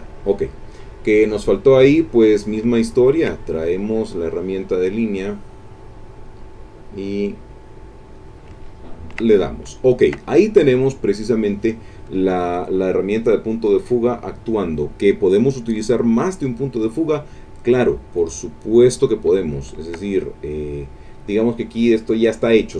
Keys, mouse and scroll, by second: 0.3 middle click, 1.7 click, 2.7 ctrl+middle click, 3.7 ctrl+click, 4.7-8.3 drag, 8.6 ctrl+click, 9.4 ctrl+click, 11.5 click, 16.5 click, 19.4 ctrl+middle click, 19.4 ctrl+click, 20.2 ctrl+click, 20.4 middle click, 20.8 click.